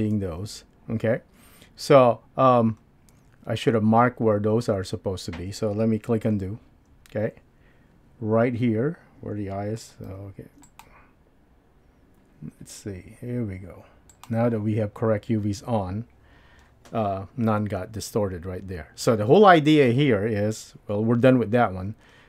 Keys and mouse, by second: 0.2 super+z, 6.3 super+z.